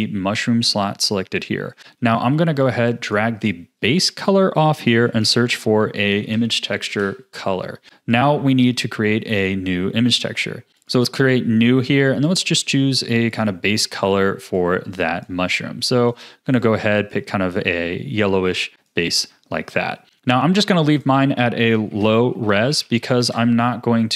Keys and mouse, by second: 0.8 click, 2.0 ctrl+s, 2.6-8.1 drag, 9.1 click, 10.8-24.1 drag, 23.0 o.